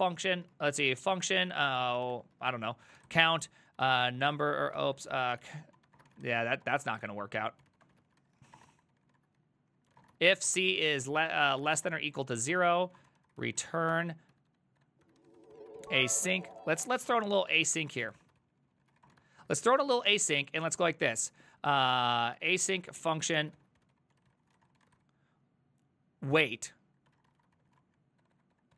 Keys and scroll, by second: 0.0-20.3 typing, 8.9 ctrl+c, 9.1 ctrl+c, 16.1 ctrl+c, 20.9 Return, 22.2-28.7 typing.